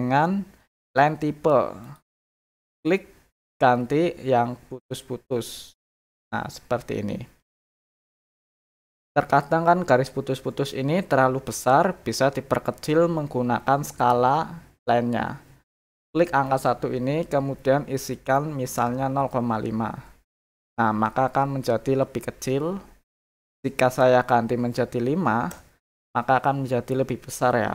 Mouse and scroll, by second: 1.8 click, 2.7 click, 5.6 click, 16.4 click, 23.0 click.